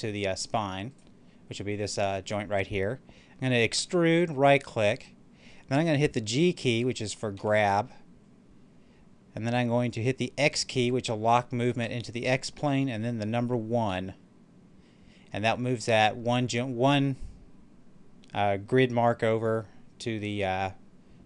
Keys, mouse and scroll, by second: 0.8 right click, 3.7 e, 4.2 right click, 7.2 g, 11.8 x, 13.7 1.